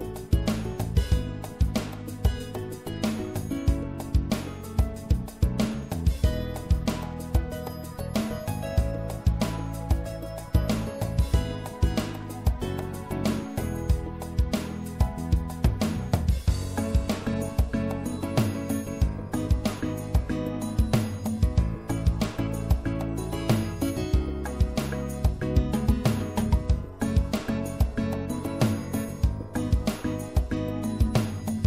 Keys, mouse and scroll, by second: 3.4 i, 8.5 i, 8.7 click, 13.3-17.1 right drag, 18.5 e, 19.9-21.7 drag, 22.6-25.5 drag, 25.9-29.3 middle drag, 29.3-31.6 right drag.